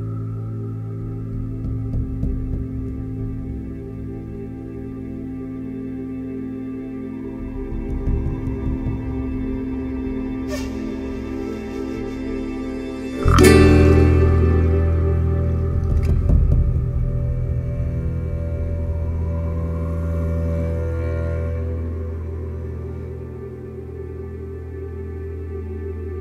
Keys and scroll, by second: 1.9 4, 10.1 b, 10.7 o, 11.1 y, 11.2 Return, 14.1 Delete, 16.0 3.